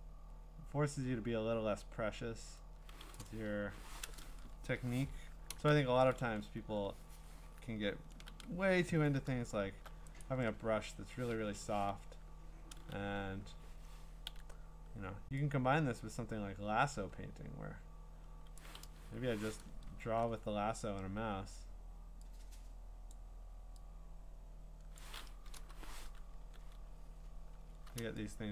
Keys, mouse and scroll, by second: 3.1 click, 3.6 BackSpace, 4.5 ctrl+z, 5.5 alt+BackSpace, 6.2 ctrl+d, 6.8-8.4 scroll, 8.8 b, 9.4 scroll, 10.2 right click, 11.4 Escape, 13.2 right click, 18.5 click, 18.9 BackSpace, 20.0 ctrl+d, 23.2 click, 25.0 click, 25.5 BackSpace, 26.4 ctrl+d, 26.8-27.8 scroll.